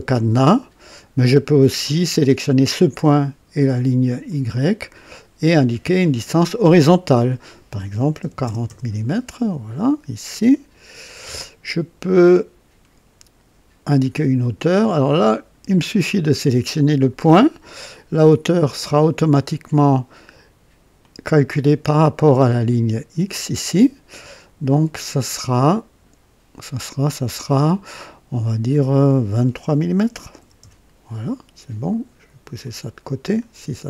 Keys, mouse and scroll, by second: 4.2 click, 5.9 click, 8.1 KP_4, 8.4 KP_0, 8.6 KP_Enter, 9.7 typing, 11.2-13.6 drag, 15.2 click, 20.9 click, 25.5 click, 30.0 KP_2, 30.3 KP_3, 30.5 Return, 32.6 click.